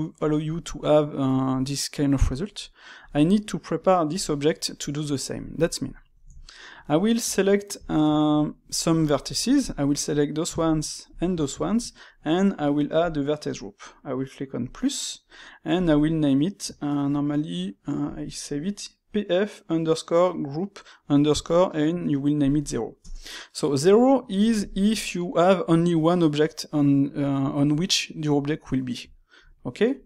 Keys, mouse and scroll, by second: 0.1 click, 3.0 click, 4.1 click, 4.5-5.7 middle drag, 5.7 click, 5.9-7.1 middle drag, 7.1 Tab, 7.7-9.5 shift+middle drag, 9.5 alt+click, 10.0-11.0 middle drag, 11.0 alt+shift+click, 11.6-12.9 shift+middle drag, 12.9 click, 14.6 click, 15.7 click, 15.8-18.8 drag, 23.9-27.6 middle drag, 29.0-30.0 shift+middle drag.